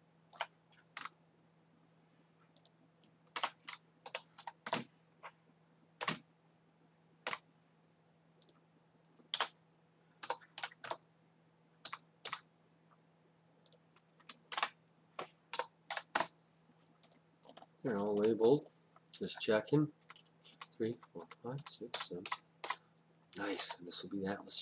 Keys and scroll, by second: 1.0 Down, 3.4 ctrl+v, 4.1 BackSpace, 4.4 7, 4.7 Return, 6.1 Down, 9.4 ctrl+v, 10.3 BackSpace, 10.6 8, 10.9 Return, 11.9 Down, 14.6 ctrl+v, 15.6 BackSpace, 16.0 9, 16.2 Return, 20.1 Down.